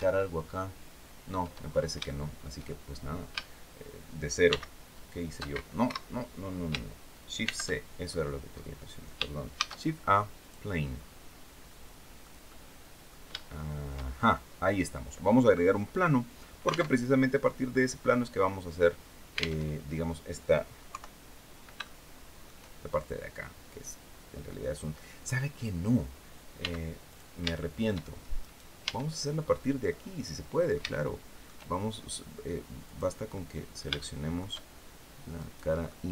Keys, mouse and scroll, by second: 0.4 scroll down 2, 1.4 scroll up 2, 1.7 shift+middle click, 4.1 shift+x, 5.5 Escape, 7.1 shift+c, 7.7-8.1 shift+scroll up 3, 9.2 shift+a, 10.1 click, 10.6-10.9 scroll down 2, 11.9-12.9 drag, 13.0 shift+middle click, 13.8-14.1 shift+scroll up 2, 16.6 alt+Tab, 19.3 alt+Tab, 20.5 KP_3, 21.5 shift+middle click, 26.2 x, 26.7 click, 27.2 shift+middle click, 28.1 right click, 28.5 Tab, 28.9-29.4 scroll up 2, 29.5-30.6 right drag, 30.7 shift+right click, 32.5 click, 33.0 middle click, 33.7 shift+middle click, 35.0 right click, 35.5 middle click.